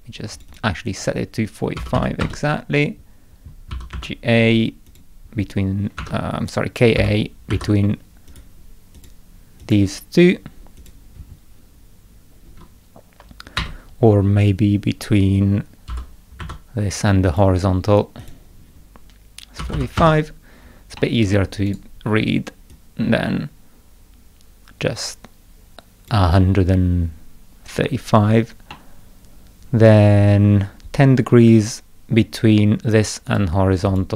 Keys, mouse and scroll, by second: 0.3 click, 0.5 click, 3.5-4.4 typing, 4.9 click, 6.0 Escape, 7.0 k, 7.5 a, 8.3 click, 9.0 click, 9.6 click, 10.8 click, 13.6 Escape, 15.9 k, 16.4 a, 17.3 click, 18.2 click, 21.0 middle click, 21.7 right click, 22.7-26.1 drag, 28.7-29.8 middle drag, 33.3 right click, 33.9 click.